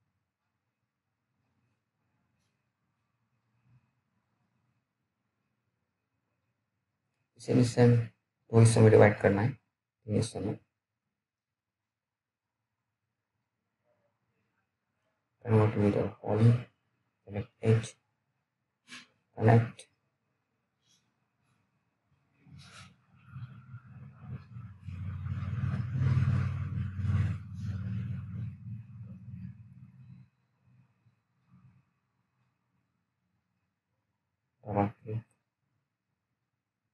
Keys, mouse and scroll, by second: 0.3 alt+middle click, 0.9-3.1 alt+scroll up 2, 3.7 F4, 6.2 click, 7.2-7.9 scroll down 1, 8.1 alt+middle click, 8.9-9.4 scroll up 1, 9.7 alt+middle click, 10.2-10.6 scroll down 1, 10.6-10.9 scroll up 1, 10.9-11.3 scroll down 1, 11.5 alt+middle click, 11.8-12.3 scroll up 1, 12.3 right click, 12.7 click, 13.2 right click, 14.5 click, 22.6 middle click, 22.8-24.2 scroll up 1, 24.2 click, 29.3 click, 33.2 click.